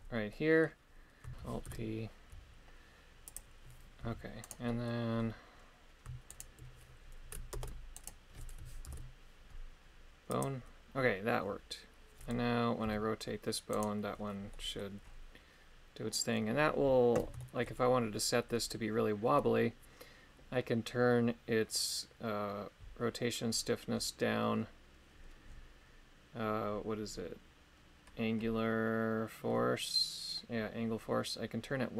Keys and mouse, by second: 0.3 middle click, 1.3 ctrl+Tab, 1.3 g, 1.6 alt+p, 4.0 g, 4.6 click, 6.3 shift+right click, 7.5 ctrl+Tab, 7.9 click, 8.8 ctrl+p, 12.8 r, 13.7 right click, 14.5 middle click, 17.4 shift+middle click.